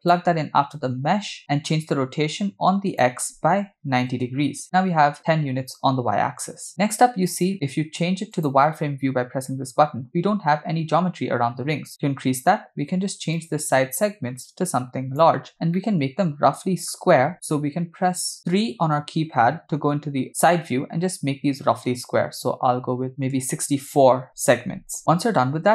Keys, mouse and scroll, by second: 2.9-4.2 drag, 8.5 click, 11.9-13.2 scroll up 3, 13.4-15.3 shift+drag, 15.8-17.0 middle drag, 18.3 KP_2, 18.3 KP_3, 21.7 scroll up 2, 23.1 click, 25.0 middle click, 25.0 scroll down 3.